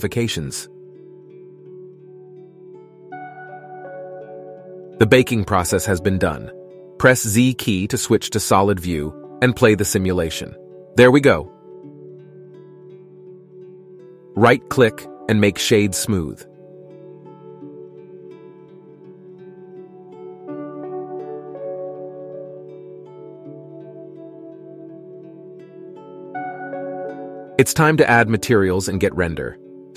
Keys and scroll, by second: 6.9 z.